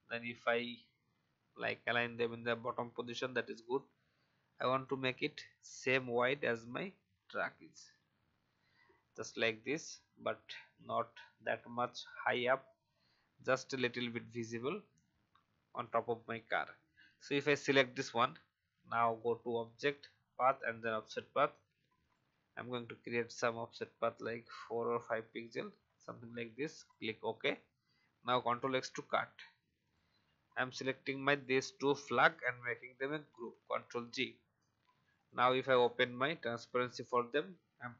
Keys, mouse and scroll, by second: 3.7 shift+click, 6.5-8.5 shift+drag, 10.6-11.1 Down, 15.8 click, 24.0-26.8 scroll up 1, 26.8 click, 28.3 ctrl+x, 29.8 click, 31.3 shift+click, 33.2 ctrl+g, 35.0-37.5 drag.